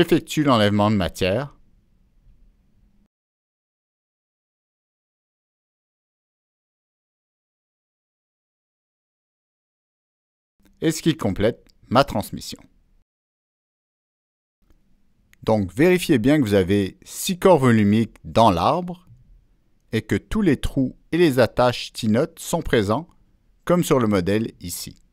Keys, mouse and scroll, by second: 3.3 click, 5.7 click, 7.8 click, 9.3 click, 10.6 click, 11.9 middle click, 12.8 scroll up 1, 21.1-21.4 scroll up 1, 22.6 click, 24.4 click.